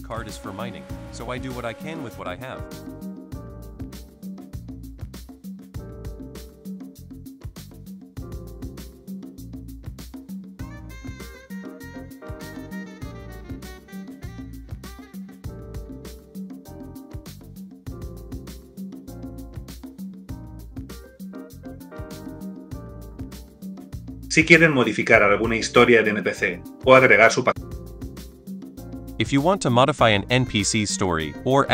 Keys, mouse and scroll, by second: 0.1 super+click, 0.2 super+click, 0.5 super+click, 0.9 super+click, 1.7 super+click, 2.5 super+click, 2.8 super+click, 3.7 super+click, 4.6 super+click, 5.4 super+click, 6.2 super+click, 6.5 super+click, 7.6 super+click, 13.2 super+click, 14.4 super+click, 14.8 super+click, 14.9 super+click, 16.0 super+click, 18.5 super+click, 18.7 super+click, 20.8 super+click, 21.1 super+click, 21.6 super+click, 22.9 super+click, 23.8 super+click, 23.9 super+click, 27.4 super+click, 28.2 super+click, 28.4 super+click.